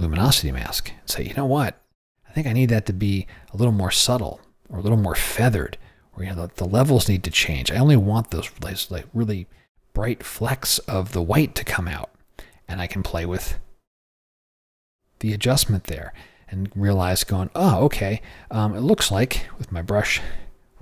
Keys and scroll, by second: 11.8 o.